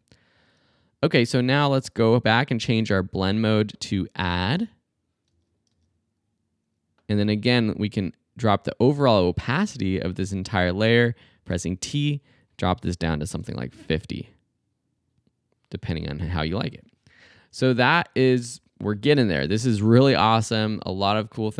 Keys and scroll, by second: 5.2 space, 11.5 t, 12.9-13.8 typing, 19.5 space.